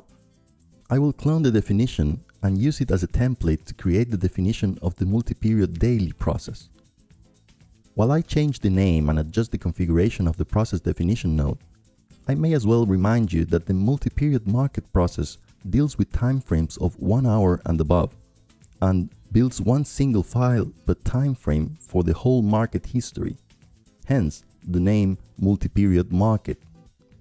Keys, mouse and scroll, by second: 0.0-1.9 drag, 4.6-5.6 drag, 7.4-8.4 drag, 10.7-12.3 drag, 13.5 click, 17.8-20.1 drag, 21.8-22.8 right drag, 22.8 click, 24.0-25.1 drag, 25.6-27.2 right drag.